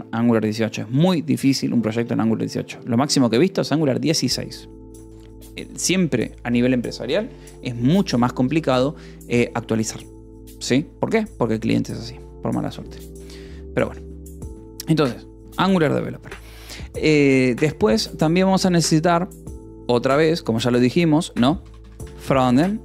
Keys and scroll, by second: 3.8 ;, 4.0 space, 21.7-22.8 typing.